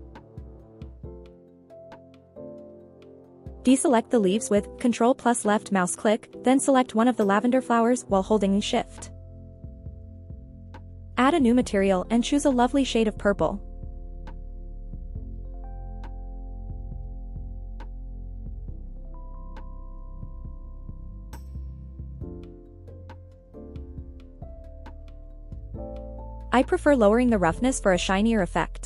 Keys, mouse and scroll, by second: 0.6-1.2 shift+middle drag, 2.1 click, 4.2 ctrl+click, 7.2 click, 7.4 ctrl+z, 7.4 scroll up 1, 7.9 scroll down 2, 8.7-9.7 scroll up 3, 9.7 scroll up 1, 10.3 shift+click, 11.9 click, 13.2-13.6 scroll down 2, 13.8 ctrl+click, 14.8-16.4 scroll up 3, 16.4 click, 27.8 click.